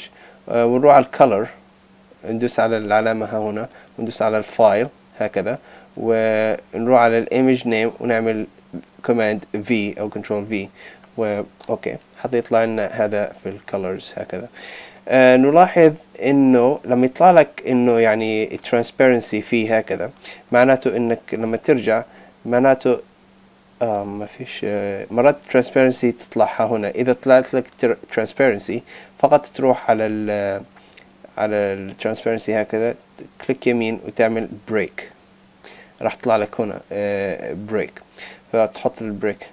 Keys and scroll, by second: 9.3 super+v, 11.6 Return.